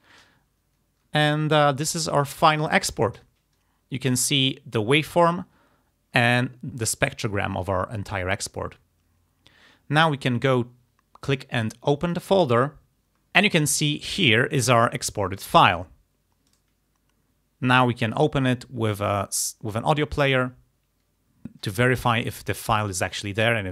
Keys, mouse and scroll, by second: 12.1 click, 16.6 right click, 20.2 click.